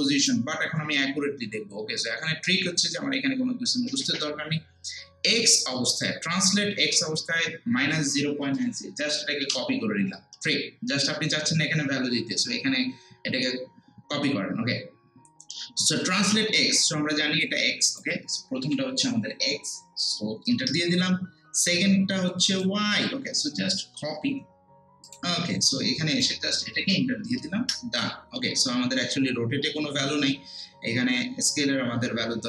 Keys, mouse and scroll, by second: 6.0 click, 8.8 click, 9.4 ctrl+c, 17.4 click, 18.6 ctrl+v, 20.5 Return, 22.5 click, 23.9 ctrl+c, 25.0 click, 26.7 ctrl+v, 27.6 Return.